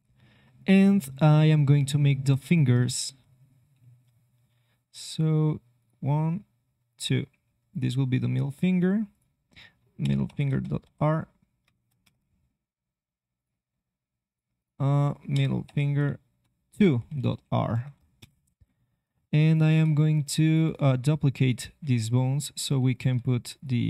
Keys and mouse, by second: 1.6 e, 5.0 g, 6.0 e, 7.7 click, 8.4 click, 13.3-18.1 drag, 19.5-21.7 drag, 19.7 c, 19.9 c, 21.7 c, 23.5 click.